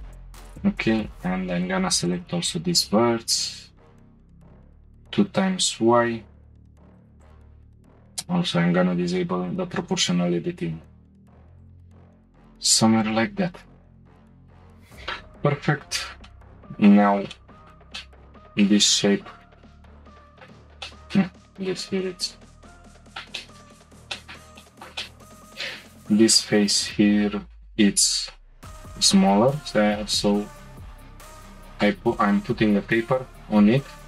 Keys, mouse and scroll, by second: 3.2 g, 7.2-9.0 drag, 9.0 g, 13.0 click, 14.1-14.4 scroll up 1, 14.4 Tab, 15.8 Tab, 16.2-19.5 middle drag, 19.5 4, 20.1 click, 20.3 shift+middle click, 20.5 scroll up 2, 20.8 shift+middle click, 21.3-21.7 scroll up 2, 21.7 Tab, 23.1 middle click, 23.2 Tab, 23.2-23.8 shift+middle drag, 23.8-24.1 scroll down 1, 24.1-25.1 middle drag, 25.1 click, 26.1 click, 27.0-28.2 scroll down 1, 28.2 s.